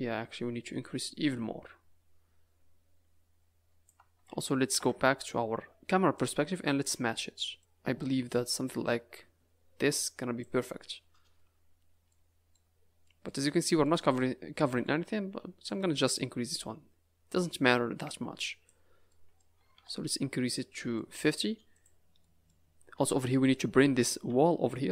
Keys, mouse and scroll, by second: 0.8 click, 4.7 KP_0, 5.7 scroll down 3, 5.7 z, 6.6 scroll up 4, 7.6 click, 11.1-11.9 scroll down 8, 12.1 middle click, 12.8 scroll up 3, 13.0 middle click, 13.3 z, 14.1 middle click, 15.6 click, 19.1 middle click, 19.5 a, 19.7 a, 20.0 middle click, 21.2-21.6 scroll up 3, 21.7 click, 22.2 middle click, 23.4-23.7 scroll down 5, 23.7 middle click, 24.2 Tab.